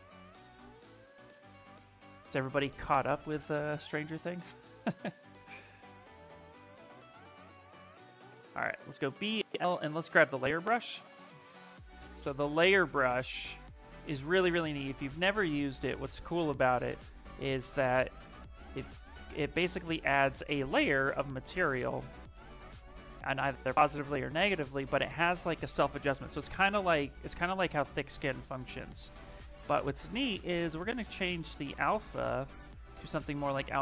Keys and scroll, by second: 6.6 b, 7.8 b, 8.2 l, 12.9 s, 14.6 shift+f, 15.9 s, 27.6 z, 28.1 s, 33.6 s.